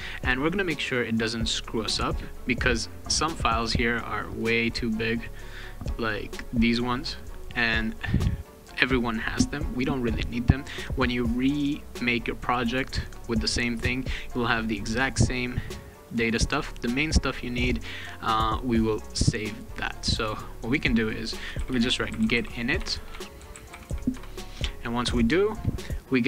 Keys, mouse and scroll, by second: 3.3 click, 3.5 click, 5.0 click, 5.2 click, 6.9 click, 14.9 click, 15.3 click, 15.7 click, 16.0 click, 17.7 click, 18.4 click, 19.8 click, 21.0-24.4 typing.